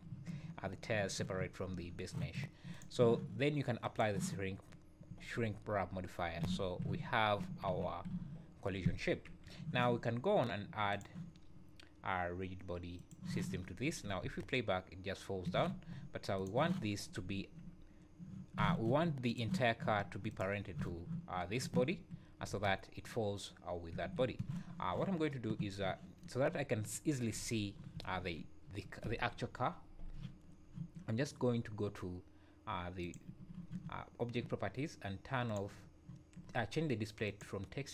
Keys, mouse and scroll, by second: 2.7 click, 3.8 click, 4.8-5.2 scroll down 2, 5.4 `, 5.8 scroll up 2, 6.5 z, 6.9 `, 7.7 z, 8.1 `, 8.8-9.5 scroll down 2, 9.3 KP_1, 10.9 click, 13.0 click, 13.7 scroll down 4, 13.8 `, 14.2 space, 15.5 Escape, 16.4 click, 16.8-17.2 scroll up 5, 17.3 `, 18.6 z, 19.3 click, 20.3 click, 20.8 z, 22.5 space, 23.9 Escape, 27.3 z, 28.0 z, 33.0 click, 35.5 click.